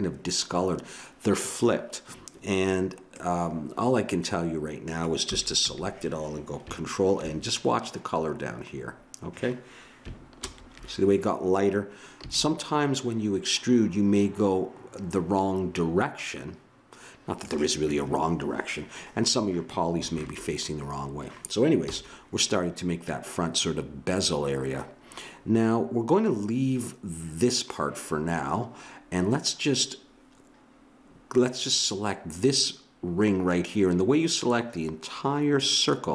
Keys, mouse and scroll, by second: 0.7-5.3 middle drag, 5.3 a, 5.6 a, 10.4 ctrl+n, 12.2 a, 21.9 KP_1.